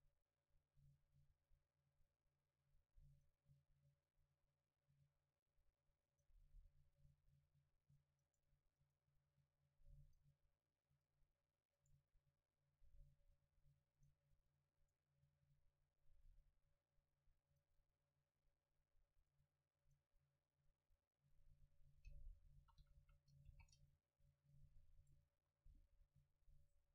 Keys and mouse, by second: 6.1-11.1 right drag, 10.1-12.4 drag, 11.9-14.1 right drag, 12.8-15.2 drag, 14.9-17.1 right drag, 16.2-19.3 drag, 21.7-25.0 middle drag, 22.6 a, 22.8 a, 23.0 a, 23.5 ctrl+s, 25.0 right click, 25.7 KP_7.